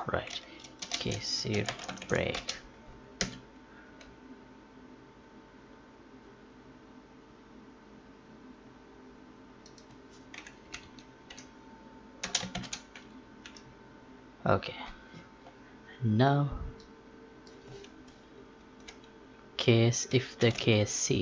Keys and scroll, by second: 12.2 space, 20.3 ctrl+c.